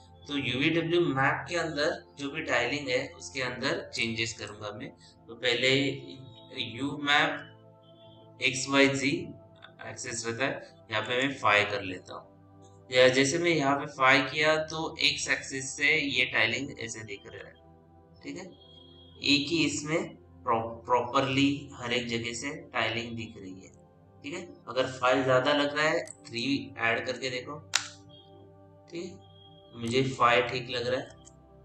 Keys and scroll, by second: 10.9 Return, 27.3 KP_3, 27.6 Return, 31.0 Return.